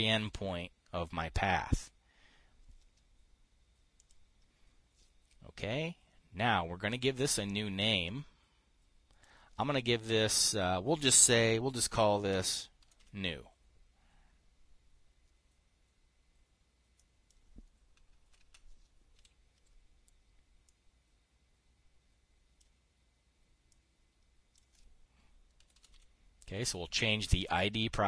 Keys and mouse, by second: 4.6 click, 8.3-9.8 drag, 12.9 n, 13.3 e, 17.5 click, 19.6 n, 21.1-23.1 drag, 24.2 click, 25.9-26.9 typing.